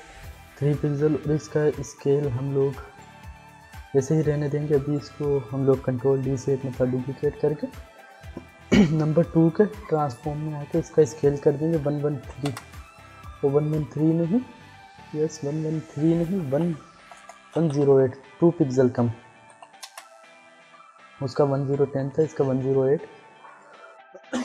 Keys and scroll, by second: 6.0 ctrl+d, 11.5 1, 12.2 3, 12.4 Return, 16.3-20.0 typing, 22.5 ctrl+d.